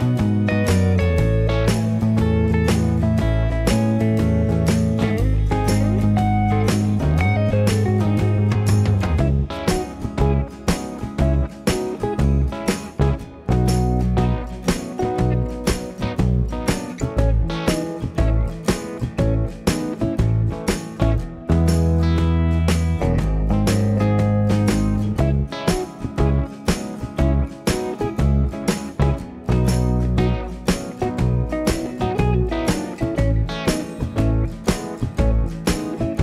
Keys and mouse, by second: 4.5 middle click, 4.6 click, 5.0-8.4 typing, 5.4-7.1 middle drag, 7.1 click, 7.5 middle click, 8.3-9.4 drag, 9.4 middle click, 9.5 r, 9.7 g, 10.1-12.3 drag, 10.1 g, 10.8-11.6 ctrl+z, 11.9 Tab, 12.3-13.7 middle drag, 13.7-15.2 drag, 15.2 middle click, 15.5-16.6 drag, 15.8 middle click, 16.6-18.1 middle drag, 17.2 KP_1, 17.6 ctrl+KP_3, 17.8 Tab, 17.8 1, 18.1 click, 18.4 middle click, 19.2-21.6 drag, 19.2 g, 21.6-29.8 middle drag, 21.6 r, 23.0 g, 23.6 r, 24.9 r, 26.4 g, 27.8 alt+z, 29.2 ctrl+KP_3, 29.5 alt+z, 29.8-30.9 drag, 30.0 g, 30.9-36.2 middle drag, 31.0 r, 31.4 r, 31.4 g, 32.9 Tab, 35.9-36.2 drag.